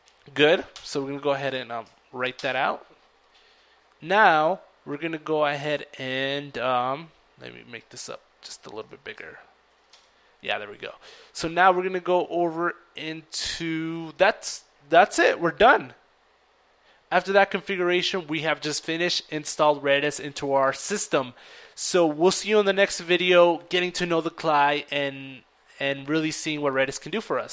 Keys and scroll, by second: 0.0 ctrl+Return, 6.9 ctrl+c, 6.9 typing, 7.2 ctrl+l, 7.3 ctrl+e, 7.3 ctrl+a, 7.4 ctrl+r, 9.5 typing.